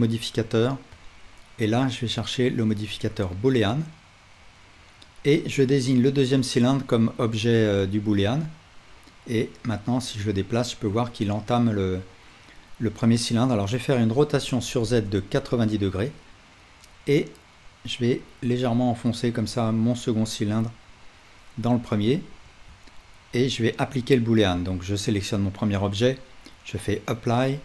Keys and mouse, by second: 5.4-7.6 right drag, 7.6-8.7 right drag, 14.2 r, 15.3 click, 15.3 right click, 23.5-26.1 right drag.